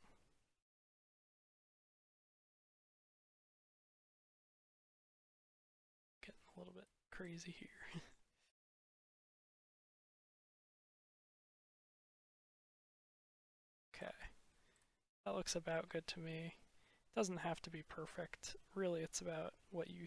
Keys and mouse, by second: 3.0-6.7 middle drag, 7.1 click, 14.7-15.8 drag.